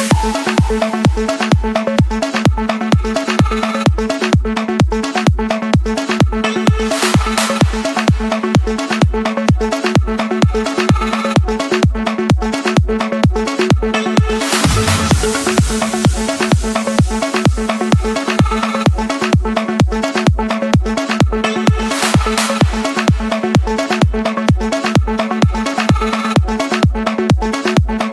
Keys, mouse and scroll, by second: 0.3 click, 0.9 click, 1.3 middle click, 1.3-1.7 scroll, 1.7 Escape, 2.7-3.7 drag, 4.9-5.9 drag, 6.8 click, 7.3 Escape, 11.0-11.4 typing, 12.0 Return, 13.3 click, 13.8 Return, 15.2 click, 15.7 Return, 16.6 middle click, 16.7 scroll, 17.3 Escape, 18.2-19.4 drag, 19.8-20.9 drag, 21.3 click, 22.8 click, 23.1 middle click, 23.1-24.2 scroll, 24.8 click, 25.1-25.6 scroll, 26.4 click, 27.1 Escape.